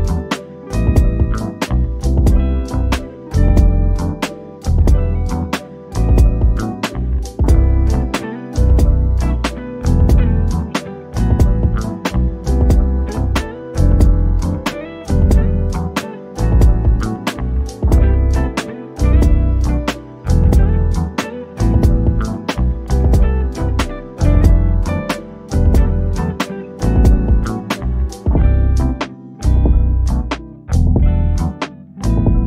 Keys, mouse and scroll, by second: 4.5-5.0 scroll down 1, 7.0 scroll up 1, 7.2 ctrl+g, 8.5 click, 9.8 shift+click, 11.9-12.3 scroll down 1, 12.3-15.0 middle drag, 15.0 ctrl+shift+d, 16.3-16.7 scroll up 1, 17.6 click, 18.7 scroll down 1, 20.6 click, 22.4 ctrl+t, 24.5 click, 25.4 typing, 27.5 typing, 30.2 click, 30.2 click.